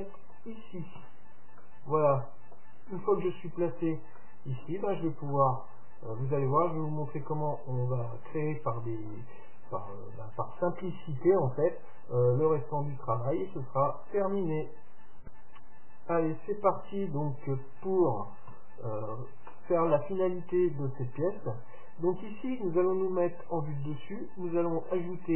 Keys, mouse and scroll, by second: 1.1 Tab, 8.3 middle click, 8.8-10.7 middle drag, 13.4-15.1 middle drag, 18.6 KP_7, 20.5-22.9 middle drag, 22.5-22.9 scroll up 1.